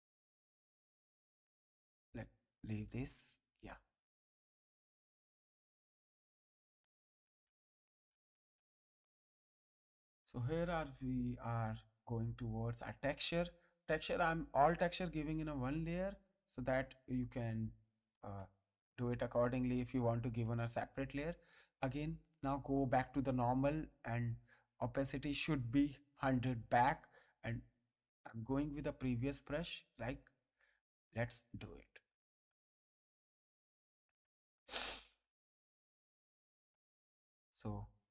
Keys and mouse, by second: 1.5 ctrl+z, 2.5 click, 6.8 click, 14.2 click, 16.5 click, 18.1 ctrl+space, 18.3 ctrl+click, 19.0 ctrl+click, 20.3 ctrl+space, 20.4 ctrl+click, 21.7 click, 23.7 click, 24.9 click, 26.9 click, 28.4 click, 29.1 space, 29.4 ctrl+click, 30.9 click, 34.8 space, 35.1 ctrl+click, 35.8 ctrl+click, 36.7 click.